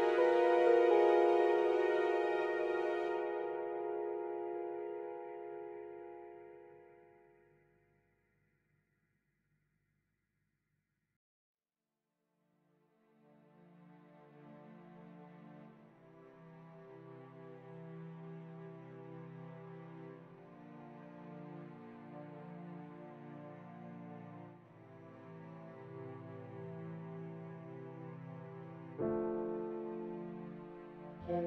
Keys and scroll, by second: 5.4 F3, 9.6 f, 10.6 ctrl+z, 23.5 ctrl+z, 25.2 Return, 26.2 F3.